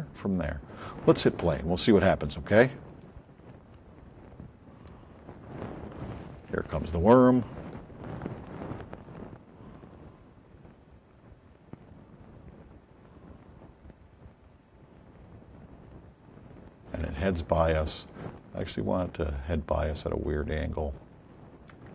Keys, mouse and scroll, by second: 2.8 click, 21.8 click.